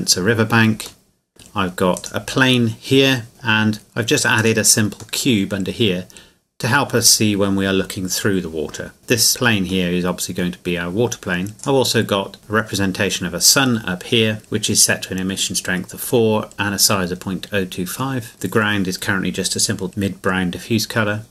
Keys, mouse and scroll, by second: 1.0 middle click, 2.0 right click, 4.4 right click, 5.2 middle click, 9.3 right click, 9.9 middle click, 11.6 right click, 12.4 middle click, 18.3 right click.